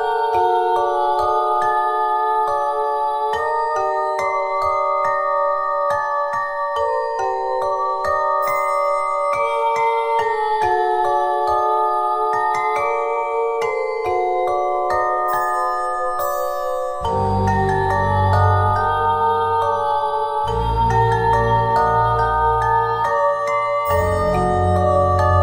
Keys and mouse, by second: 0.0 r, 2.1 s, 2.6-4.0 drag, 4.0-5.7 middle drag, 4.8 e, 5.7-7.1 drag, 7.7 e, 11.6 r, 12.8-13.9 middle drag, 15.8 z, 17.3 ctrl+Tab, 20.0 KP_3, 20.7 r, 23.5 e, 24.6-25.4 drag.